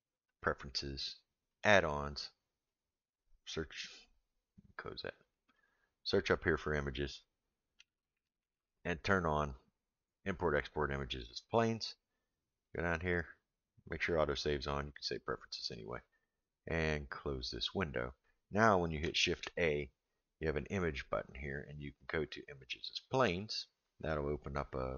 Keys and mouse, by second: 19.2 shift+a.